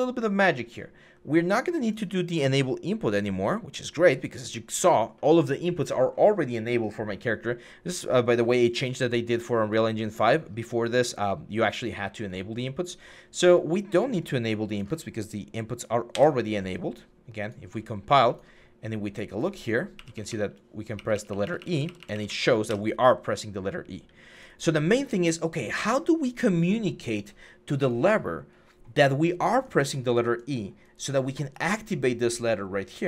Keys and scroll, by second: 15.9 Delete, 19.7-21.9 typing, 22.5 Escape.